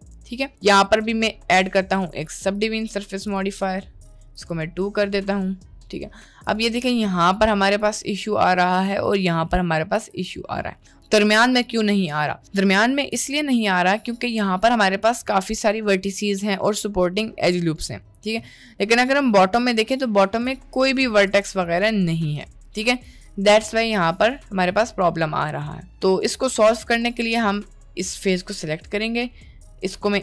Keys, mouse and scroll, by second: 2.1 click, 2.3-3.5 drag, 4.4 click, 6.9-7.3 middle drag, 8.3 middle drag, 9.1 middle click, 10.0 Tab, 11.6 middle click, 13.0 click, 15.4 middle click, 15.8 middle click, 16.4 middle click, 17.7 middle click, 18.8 middle click, 19.1 middle click, 20.0 1, 21.4 click, 21.8 middle click, 22.4 right click, 23.0 click, 24.3 middle click, 25.0 middle click, 26.2 middle click, 27.3 click, 28.6 middle click, 29.9 i.